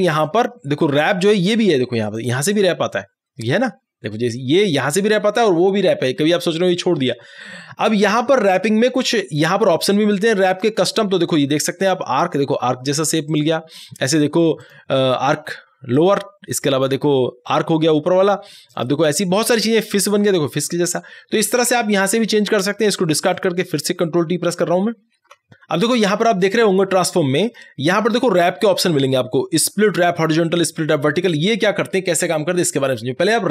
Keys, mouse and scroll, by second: 0.1 ctrl+t, 2.2 click, 10.5 click, 23.4 click, 23.4 click, 25.2 ctrl+t, 26.5 ctrl+t, 26.5 click.